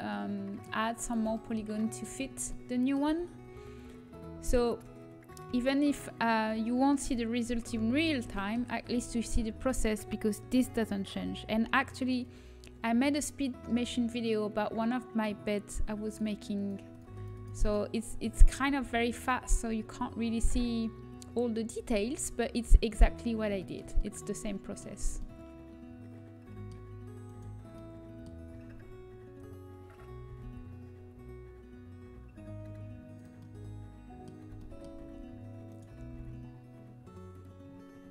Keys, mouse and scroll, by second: 2.0 a, 3.0 z, 7.5 KP_3, 7.5 KP_1, 11.9 z, 11.9 c, 18.4 middle click, 18.6 g, 24.9 z, 27.2-30.9 drag, 30.9 g, 33.3-35.2 drag, 34.9 z, 35.9 g.